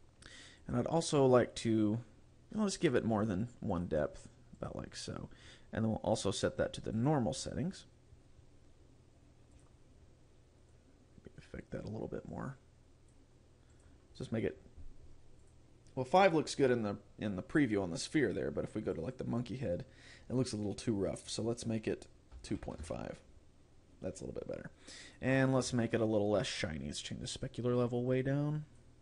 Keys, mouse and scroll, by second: 0.7 click, 3.0 click, 3.8 click, 4.7 click, 5.7 scroll down 4, 7.1 click, 7.4-7.8 scroll up 4, 9.7 click, 10.8 click, 13.8 click, 15.5 click, 19.0 click, 21.3 click, 25.1 click, 26.7 click, 27.5 click.